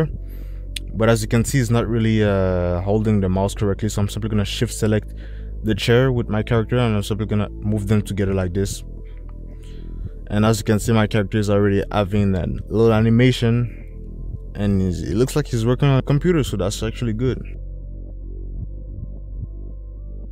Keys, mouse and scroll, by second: 11.0 space, 16.3 space, 19.1 ctrl+s.